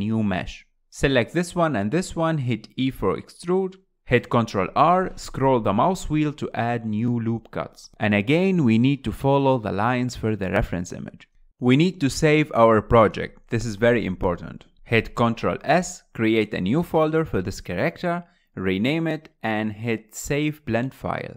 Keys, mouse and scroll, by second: 0.0-1.4 typing, 0.0 shift+middle click, 0.1 click, 0.4 click, 0.6 click, 0.6 shift+middle click, 4.8 ctrl+r, 7.7 click, 8.3 click, 8.6 scroll up 4, 8.6-11.2 typing, 9.0 click, 9.8 click, 10.2 click, 10.5 click, 11.1 click, 11.5 middle click, 12.2 KP_1, 12.3 KP_1, 14.6 ctrl+s, 14.7 ctrl+s.